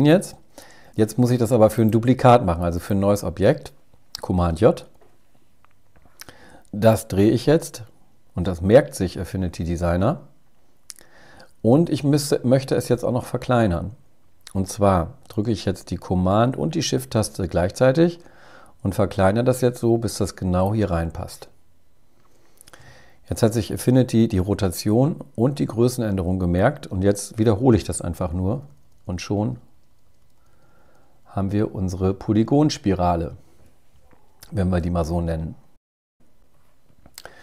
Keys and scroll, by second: 3.8 super+j, 8.9 shift+Up, 27.2 super+j, 27.7 super+j, 28.3 super+j, 29.0 super+j, 29.7 super+j, 30.3 super+j, 30.6 super+j, 30.8 super+j, 31.6 super+j, 32.3 super+j.